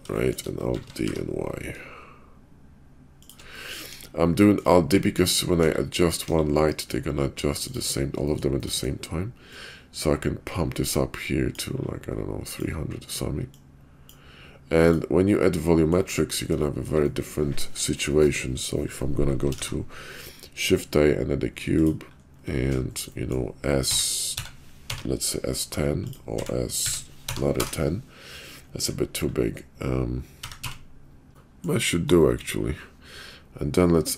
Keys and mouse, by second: 0.2 shift+right click, 0.7 alt+d, 3.5 middle drag, 3.9 KP_5, 4.4 middle drag, 5.0 shift+middle click, 5.6 KP_5, 6.3 KP_5, 6.7 middle drag, 7.7 click, 8.2 shift+middle click, 8.6 shift+right click, 8.7 click, 9.5-11.6 drag, 12.5 click, 14.9 click, 15.4-15.9 middle drag, 16.7 shift+right click, 17.1 middle click, 19.5 shift+a, 23.1 middle drag, 23.9 s, 26.4 s, 30.4 s, 31.3 middle click, 34.0 click.